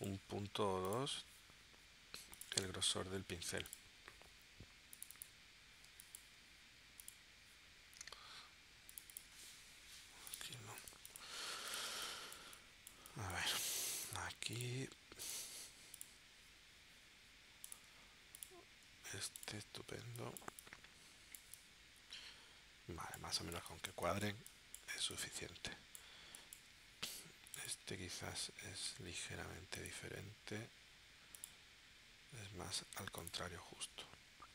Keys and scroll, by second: 5.9 space, 11.9 space, 20.0 space.